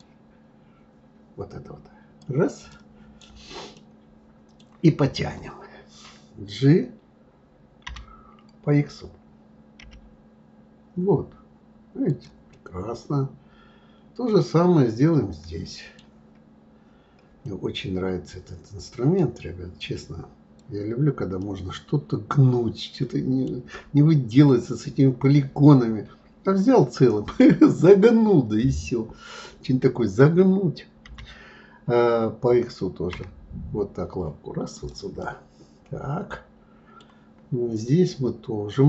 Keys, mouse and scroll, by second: 0.0 click, 2.7 right click, 3.7-6.7 middle drag, 12.5-15.5 middle drag, 17.4-19.1 middle drag, 19.1 click, 21.4-24.4 middle drag, 35.2-37.8 middle drag, 37.8 click.